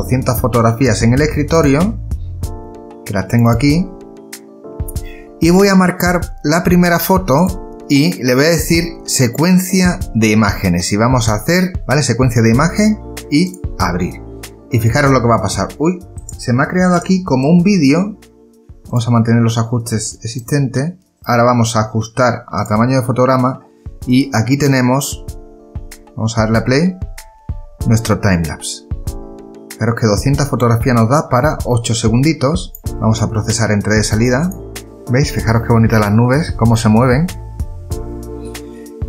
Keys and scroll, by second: 25.0 space, 29.6 space, 32.9 o.